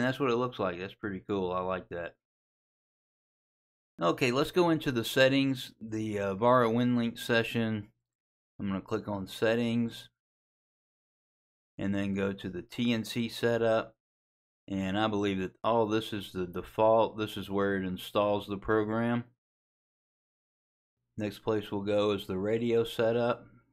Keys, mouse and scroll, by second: 0.3 click, 9.9 click, 13.6 click, 21.3 click, 22.6 click.